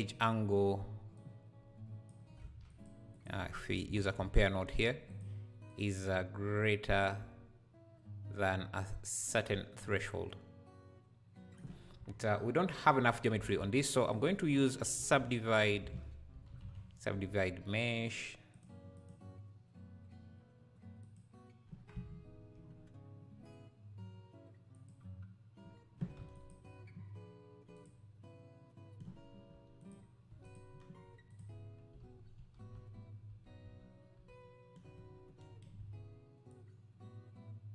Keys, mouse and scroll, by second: 2.4 shift+a, 6.6-9.7 drag, 11.9 scroll down 2, 13.4 shift+a, 21.0-22.1 drag, 24.7-26.1 drag, 26.1 q, 27.7-30.5 drag, 29.5 q, 30.3 q, 31.3 click, 31.9 n, 32.3 n, 32.7 m, 33.3 m, 36.5-37.7 shift+drag.